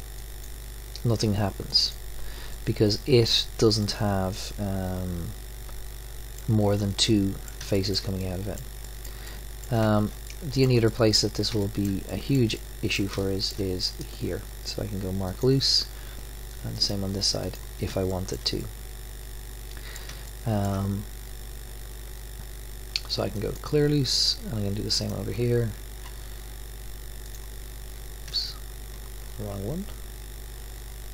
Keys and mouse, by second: 2.5-3.8 middle drag, 5.6 middle click, 5.8 middle click, 7.1 middle click, 15.1 click, 15.7 click, 17.1 click, 18.1-22.6 middle drag, 18.9 click, 23.3-24.9 drag, 24.9 middle click, 25.3-26.9 drag, 27.2-29.6 drag.